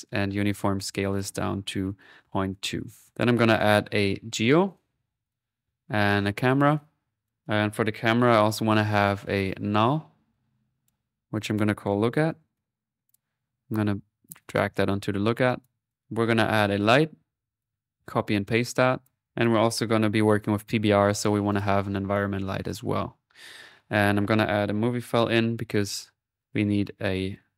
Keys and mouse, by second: 3.1 middle click, 3.6 right click, 4.1-6.5 typing, 4.6 click, 5.3 click, 6.2 click, 6.8 click, 7.9-8.6 typing, 9.0 click, 9.6 click, 10.3-13.0 drag, 13.1 click, 13.6-15.1 drag, 15.2 middle click, 15.5-16.9 drag, 16.7-18.7 typing, 17.6 click, 18.5 ctrl+click, 19.2 ctrl+click, 19.3 ctrl+click, 19.8-20.5 typing, 21.5 click, 22.5 click, 23.7 click, 25.0-25.7 typing, 26.0-27.5 drag.